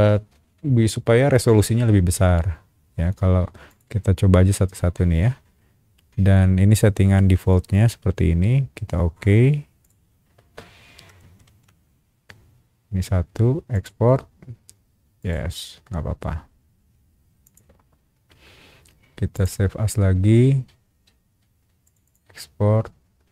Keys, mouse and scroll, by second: 3.7 click, 9.8 click, 11.4 shift+q, 13.7 click, 15.2 click, 17.4 click, 19.3 click, 21.8 click, 22.0 click.